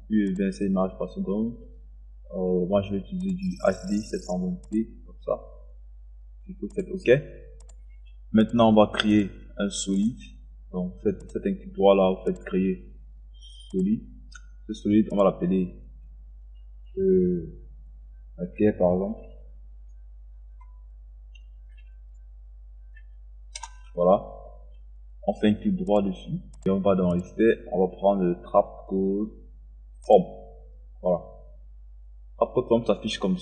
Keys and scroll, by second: 23.6 Return.